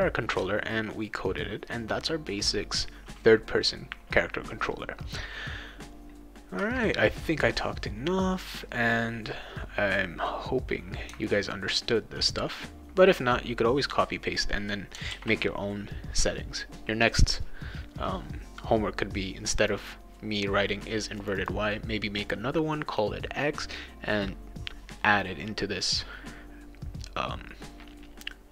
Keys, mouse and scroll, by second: 8.4 click, 14.0 click, 15.1 ctrl+s, 19.6 click, 19.8 click, 21.2 click, 21.4 click.